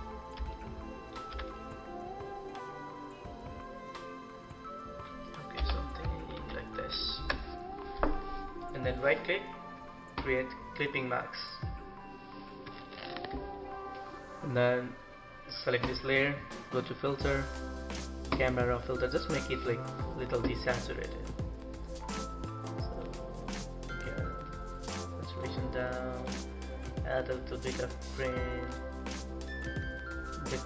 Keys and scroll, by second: 5.3 Return, 6.0 ctrl+=, 6.4 ctrl+=.